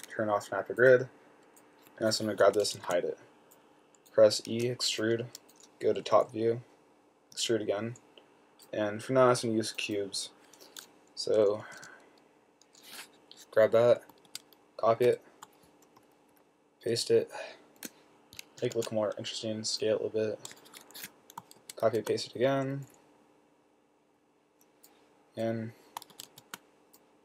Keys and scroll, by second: 3.1 h, 4.8 e, 6.4 7, 7.7 typing, 12.0 4, 14.5 super+c, 15.3 super+v, 16.4 shift+Up, 16.7 Right, 17.2 Right, 17.4 Right, 17.5 Right, 17.6 Right, 17.8 Right, 17.9 Right, 18.0 Right, 18.1 Right, 18.2 Right, 19.0 s, 21.3 Escape, 21.9 super+c, 22.1 super+v, 23.0 shift+Up, 23.3 Right, 23.7 Right, 23.9 Right, 24.3 Right, 24.4-27.2 Right, 26.4 super+c, 26.5 super+v.